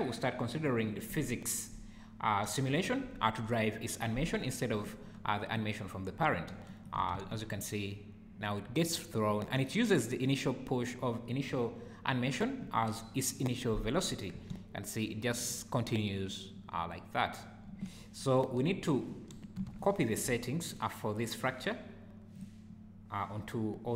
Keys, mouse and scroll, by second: 5.5 click, 6.7 shift+right click, 7.1 space, 9.4 Escape, 14.3 space, 17.7 Escape, 19.8 shift+right click, 22.3 click.